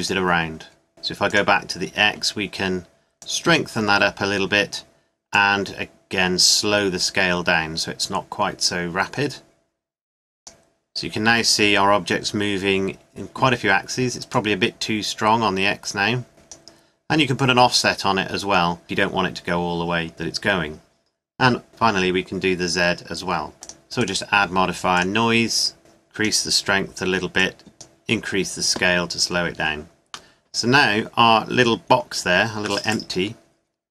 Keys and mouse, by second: 5.1 middle click, 14.5-16.1 middle drag, 17.5-18.8 drag, 23.6-25.9 drag, 26.9 middle click, 29.2 middle click, 32.0-33.0 middle drag.